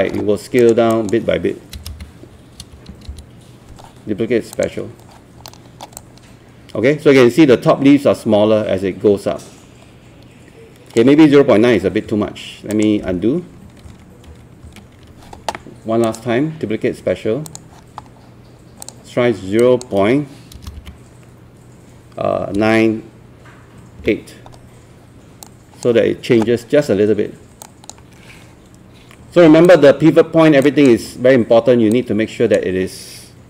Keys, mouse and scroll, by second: 0.6 click, 1.8 KP_0, 1.9 KP_Decimal, 2.6 KP_9, 4.6 click, 5.5 alt+middle click, 6.1-11.0 alt+drag, 12.1 Escape, 12.7 click, 13.9 ctrl+z, 14.3 ctrl+z, 14.7 ctrl+z, 16.1-18.5 drag, 20.6 KP_0, 20.8 KP_Decimal, 22.6 KP_9, 24.0 KP_8, 25.4-26.5 drag, 29.2 8, 29.7 click, 31.0 8, 31.9-33.4 drag.